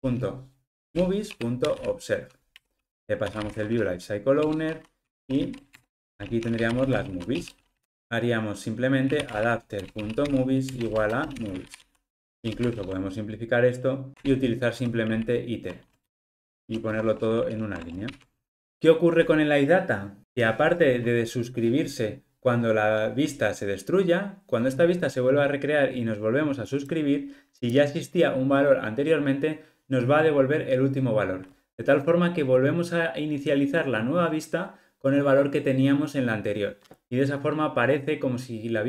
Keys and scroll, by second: 9.7 Return, 12.7 alt+Return, 17.5 alt+super+l, 18.1 ctrl+alt+o.